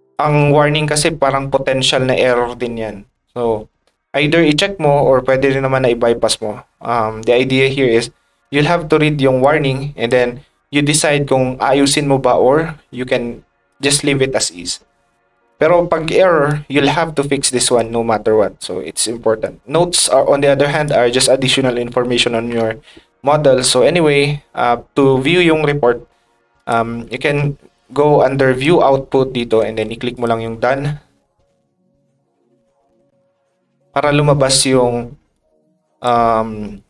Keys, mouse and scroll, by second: 8.6 r, 9.4 ctrl+click, 10.9-13.7 drag, 13.1 ctrl+right click, 16.5-17.7 ctrl+drag, 20.0 ctrl+click, 22.9 click, 24.0 click, 26.6 click, 27.7 ctrl+click, 28.6-30.1 ctrl+drag, 35.3 click.